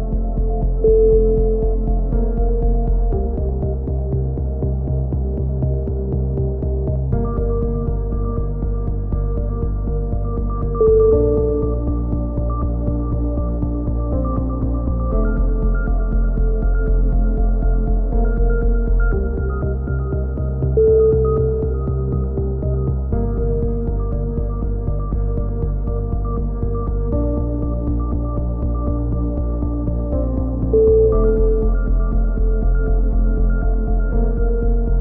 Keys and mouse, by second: 0.6 click, 1.0 a, 1.1 z, 1.3 middle click, 1.6-4.3 drag, 3.9 KP_7, 4.3-7.1 middle drag, 6.2 z, 7.1 click, 9.8 a, 10.0 z, 10.4-12.1 drag, 12.1-13.7 middle drag, 13.7 click, 13.7 KP_3, 13.8 middle click, 14.3 z, 14.8 z, 15.0 click, 16.1 click, 16.2 middle click, 16.6 KP_7, 16.8 middle click, 17.8 click, 18.7 ctrl+z, 19.2 middle click, 19.8 click, 20.4 s, 21.8-23.1 drag, 23.1 a, 23.2 middle click, 23.4 KP_7, 24.3 a, 24.8 a, 26.5 click, 28.0 KP_3, 28.1-29.4 middle drag, 28.8 z, 29.4 c, 31.5-33.0 drag, 32.8 c, 33.8-35.0 drag.